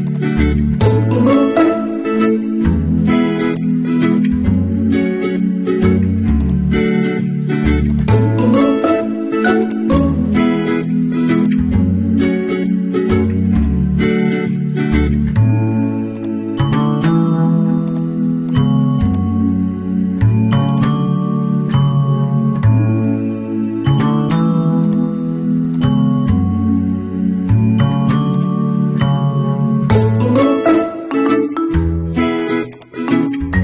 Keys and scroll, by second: 18.8 Return, 23.6 Return, 27.5 ctrl+t, 29.2 Return.